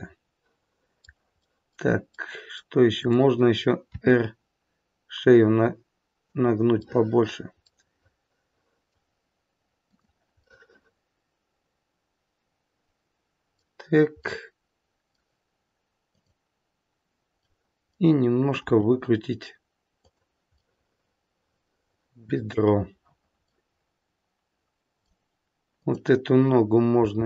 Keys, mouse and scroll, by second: 1.4 middle click, 2.1 middle click, 2.9 click, 3.8 r, 6.8 middle click, 7.6 middle click, 9.8 click, 10.6 middle click, 14.3 middle click, 16.0 click, 17.5 middle click, 18.6 r, 20.5 middle click, 23.5 middle click, 25.7 click, 26.9 g.